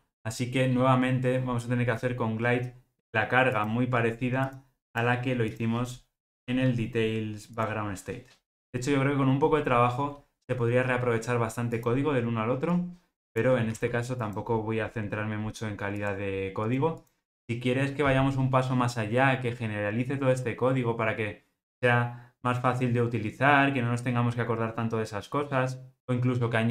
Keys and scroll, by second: 13.7 super+c.